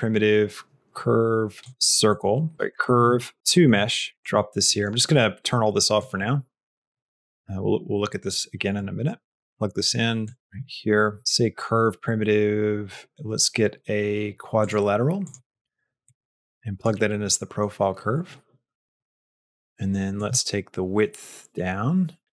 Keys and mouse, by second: 2.5 BackSpace, 4.5 click, 5.9 click, 7.0 click, 8.8 click, 10.2 click, 15.9 click, 20.0-22.2 shift+drag.